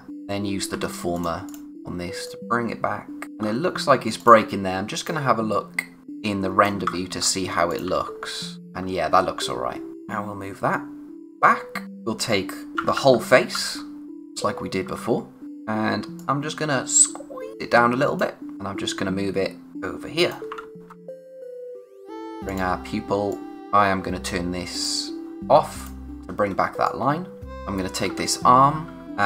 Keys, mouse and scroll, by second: 1.7-2.2 scroll up 1, 2.2 click, 3.2 space, 3.4-4.2 scroll up 1, 4.2 click, 6.0 space, 6.2 click, 6.5 space, 6.9-7.4 scroll up 1, 7.7 click, 7.8 a, 8.6 click, 8.7-9.9 scroll down 1, 9.9 click, 12.7-13.5 typing, 14.8 typing, 15.4 click, 20.6 ctrl+z, 22.3-23.3 scroll up 2, 22.4 click, 23.3 click, 26.1-26.5 scroll down 1, 26.5-28.9 typing, 26.8 click, 27.5 click, 29.0 click.